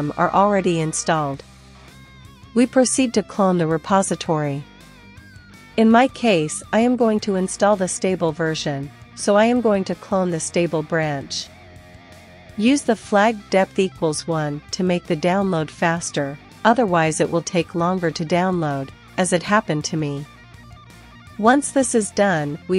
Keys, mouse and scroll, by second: 1.5 ctrl+super+h, 3.3-6.2 drag, 5.6 ctrl+c, 6.2 ctrl+super+l, 6.3-9.8 typing, 21.2 click.